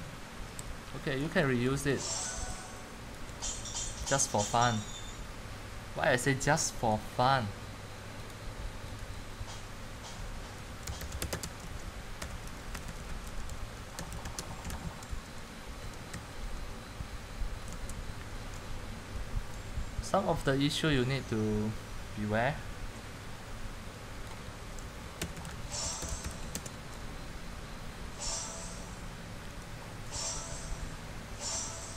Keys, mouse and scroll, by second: 0.0-0.4 drag, 0.4-4.8 typing, 4.7 click, 7.0-8.7 drag, 9.3 click, 10.5-14.6 typing, 12.4 click, 18.0-18.8 typing, 19.8 click, 24.8-27.1 typing, 29.8 right click, 30.3-31.9 drag.